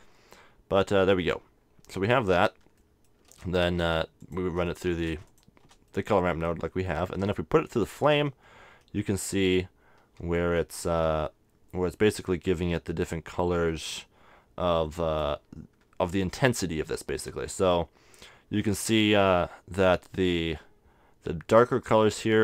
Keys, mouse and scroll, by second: 0.9-4.2 middle drag, 4.2-6.9 drag, 4.2 right click, 5.9 right click, 6.6-8.4 middle drag, 7.7-9.5 drag, 10.4-12.2 drag, 14.8-18.2 drag, 18.8-20.9 middle drag, 22.3-22.4 drag.